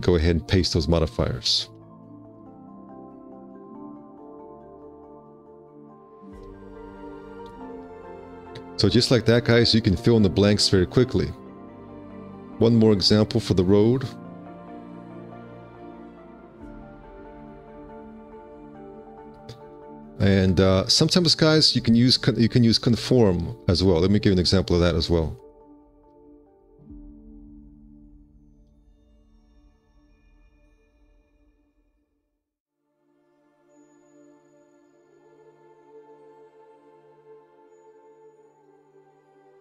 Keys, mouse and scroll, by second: 2.3 F4, 4.6 2, 6.1 w, 6.4 space, 7.6 2, 7.8 q, 9.6 alt+q, 15.2 1, 15.6 space, 16.8 ctrl+1.